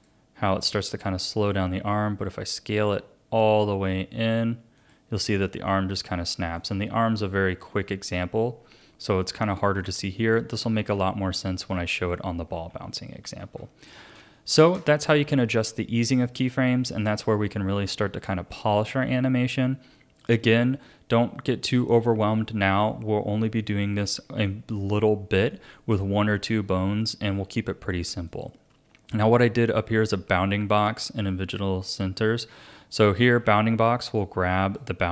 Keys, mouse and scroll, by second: 1.0 s, 5.7-9.6 drag, 9.8-11.1 drag, 11.1 ctrl+z, 11.6 ctrl+z, 12.7 ctrl+z, 13.2 ctrl+z, 13.9 a, 14.3-19.2 shift+middle drag, 24.4-28.3 shift+middle drag, 28.3-31.4 drag, 33.2-34.2 scroll down 6, 34.2 click.